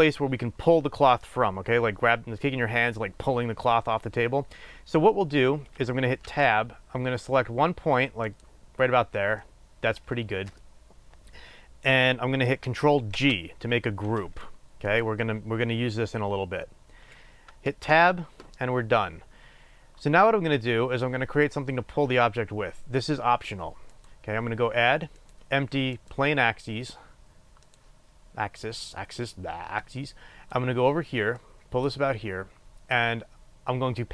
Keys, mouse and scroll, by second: 5.0-6.6 scroll up 1, 6.6 Tab, 8.9 click, 9.5 middle click, 18.0 Tab, 18.0-19.3 middle drag, 19.3-23.4 scroll down 1, 23.9-27.9 drag, 29.2-34.1 drag.